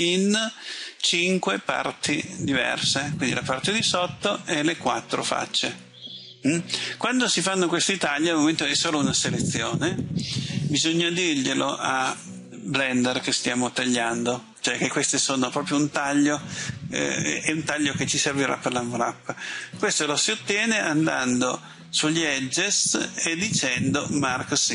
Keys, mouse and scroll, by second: 19.7 click.